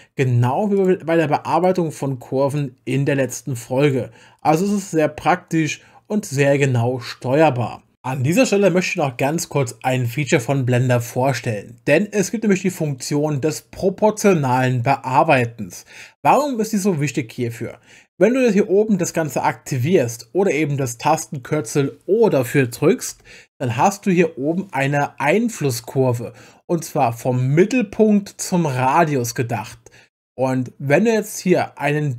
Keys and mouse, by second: 0.8 click, 1.5 click, 2.6-3.9 drag, 4.4 click.